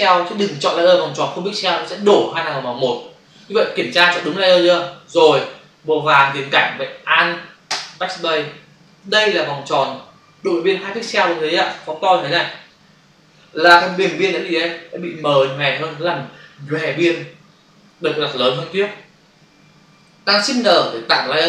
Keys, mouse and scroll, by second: 5.1 click, 7.8 alt+BackSpace, 9.0 ctrl+d, 11.7 v, 12.4 ctrl+click, 20.7 ctrl+shift+n.